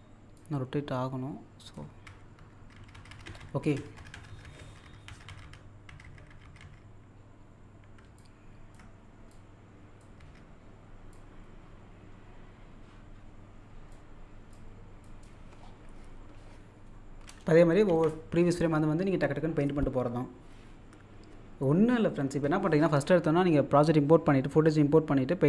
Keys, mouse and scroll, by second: 0.4-2.1 ctrl+drag, 5.7 scroll down 1, 8.2-10.2 ctrl+drag, 11.2-14.1 drag, 14.1-14.5 scroll down 1, 14.6 click, 15.3-15.6 scroll down 1, 16.5 scroll down 1, 17.9 z, 18.6-19.0 scroll up 1, 21.3-22.0 scroll up 1.